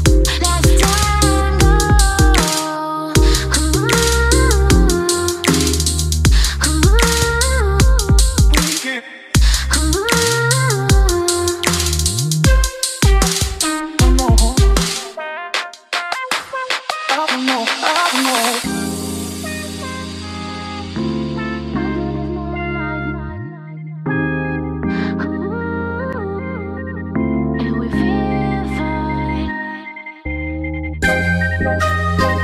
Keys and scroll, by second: 0.0 ctrl+g, 7.8-10.5 typing, 8.7 Caps_Lock, 11.9-12.7 typing, 27.3 ctrl+d.